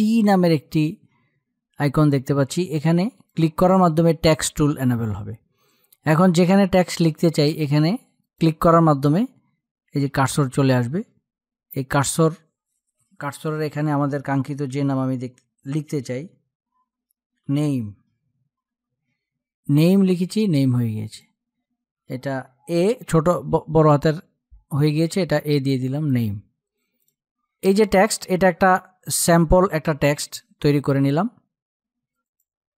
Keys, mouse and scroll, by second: 2.8 click, 7.9 click, 16.3 click, 16.8-19.0 typing, 23.1 BackSpace, 23.4 a, 25.7-31.9 drag.